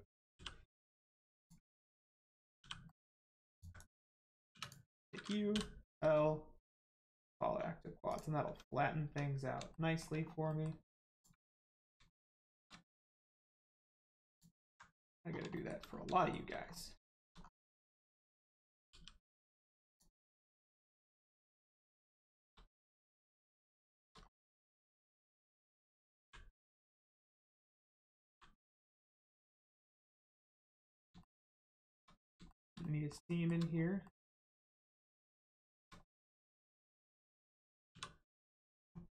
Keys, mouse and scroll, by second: 0.3 g, 0.6 middle click, 1.4 ctrl+click, 1.8 click, 2.6 g, 2.8 middle click, 3.4 ctrl+click, 3.8 click, 4.5 3, 4.6 click, 5.8 right click, 6.8 click, 7.2 scroll down 1, 8.0 click, 8.4 Tab, 9.7 shift+middle click, 10.2 scroll up 1, 10.4 middle click, 11.1 click, 11.4-11.8 scroll up 1, 12.1 shift+middle click, 14.0 alt+middle click, 14.2 alt+click, 15.2 scroll down 1, 15.5 shift+middle click, 15.8 scroll up 1, 16.2 shift+middle click, 16.6 scroll up 1, 17.0 shift+middle click, 17.4 scroll up 1, 18.4 scroll down 1, 18.8 g, 19.8 click, 20.3-21.2 scroll down 1, 21.2 middle click, 22.2 shift+middle click, 22.8 middle click, 22.9 middle click, 24.5 middle click, 24.6 middle click, 25.2-25.8 scroll down 1, 26.8-27.2 scroll up 1, 27.4 shift+middle click, 27.8 scroll down 1, 28.2 g, 28.9 click, 29.1 shift+middle click, 29.5 scroll up 1, 29.9 middle click, 31.1 shift+middle click, 32.8 middle click, 32.9 middle click, 33.3 shift+middle click, 34.0 middle click, 34.1 middle click, 34.5 scroll down 1, 35.1 middle click, 35.6 shift+middle click, 36.1 scroll up 1, 36.5 scroll down 1, 37.9 2.